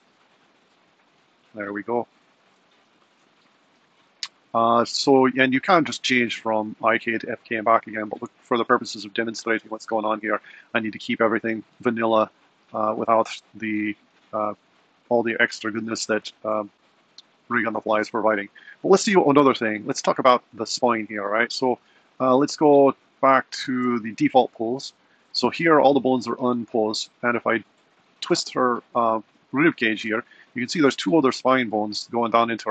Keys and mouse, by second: 1.0 super+z, 19.8 click, 23.8 shift+Left, 27.6 r.